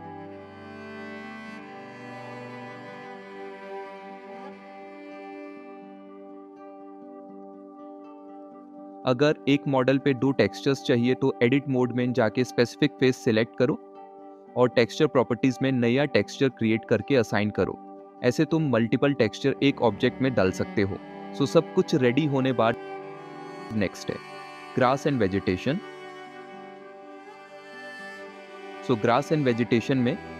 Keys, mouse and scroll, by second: 2.9 click, 5.8 shift+Tab, 6.5 click, 8.5-9.4 middle drag, 11.7 Tab, 12.4 a, 13.8 click, 16.6 KP_Enter, 16.6 KP_7, 16.6 KP_0, 17.5 s, 18.8 click, 20.1 s, 20.3 x.